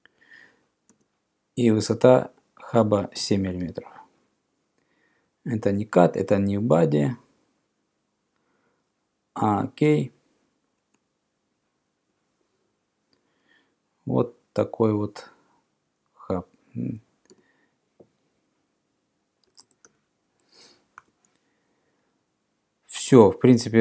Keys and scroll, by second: 0.9 e, 3.7 7, 17.3 f, 19.3-20.4 typing, 21.0 Return.